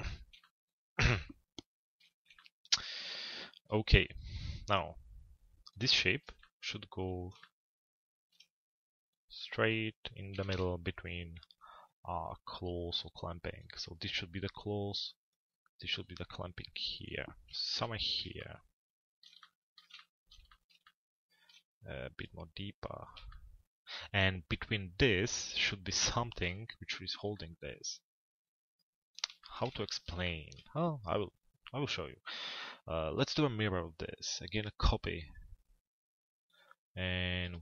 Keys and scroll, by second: 10.0 t, 10.5 z, 17.5 p.